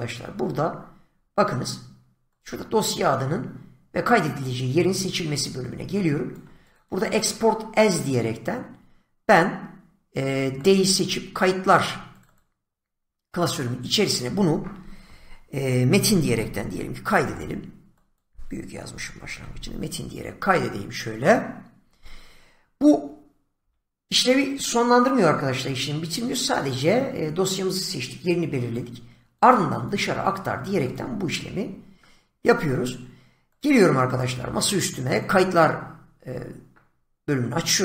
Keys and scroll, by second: 15.9 Caps_Lock, 16.0-17.2 typing, 18.8-20.1 typing, 18.9 Caps_Lock, 23.5 BackSpace.